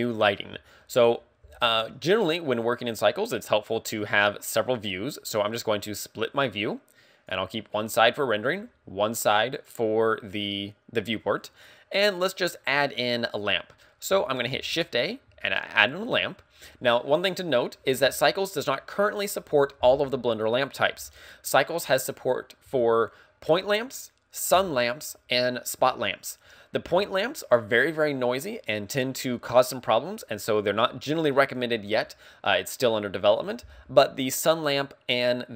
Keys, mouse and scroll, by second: 5.0 click, 11.6-12.3 scroll down 2, 14.6 shift+a, 14.7 scroll down 1.